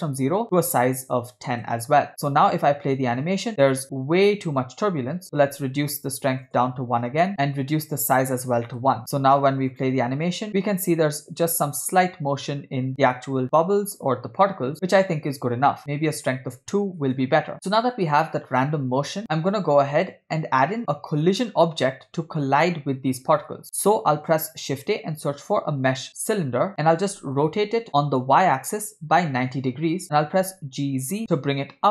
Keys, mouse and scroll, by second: 2.3 click, 2.6 space, 4.5 space, 5.2-6.6 drag, 7.3 space, 8.1 click, 9.8 click, 10.0 space, 15.4 space, 16.2 click, 17.5 space, 19.2 space, 24.4 shift+a, 27.5 r, 30.3 g.